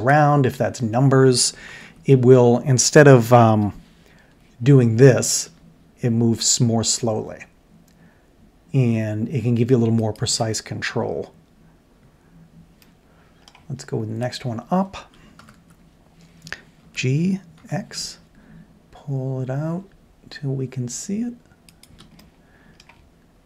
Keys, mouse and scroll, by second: 1.7 ctrl+KP_7, 3.5 g, 12.8-13.4 middle drag, 13.5-14.3 middle drag, 14.3-15.1 middle drag, 15.4 ctrl+KP_7, 16.8 g, 22.2-22.7 middle drag.